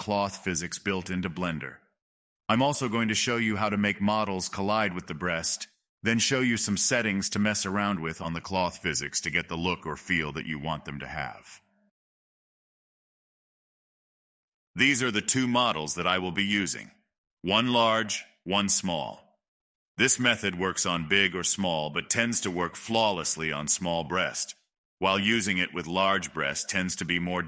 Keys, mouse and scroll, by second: 0.6-1.4 middle drag, 1.4 space, 1.8-2.2 drag, 2.2 space, 4.1-7.1 middle drag, 7.5 shift+middle drag, 7.7-8.3 shift+scroll down 5, 8.5-9.8 middle drag, 9.8 space, 10.9 middle drag, 11.2-13.6 right drag, 15.3-16.5 middle drag, 16.5 scroll up 2, 18.1-21.1 shift+middle drag, 25.7-27.4 middle drag.